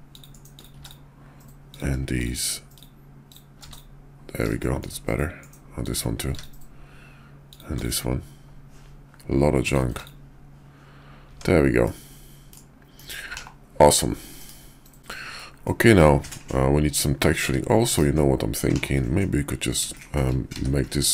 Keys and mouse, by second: 0.5 click, 0.7 x, 1.6 click, 3.7 x, 4.5 shift+click, 5.7 click, 6.2 x, 7.7 x, 9.5 click, 9.9 x, 11.2 Tab, 11.8 middle click, 12.9 KP_5, 13.3 /, 14.4 KP_5, 15.3-15.8 middle drag, 16.9-17.4 drag, 17.4 `, 17.8 KP_5, 18.7 /, 19.9 shift+drag, 20.4 d.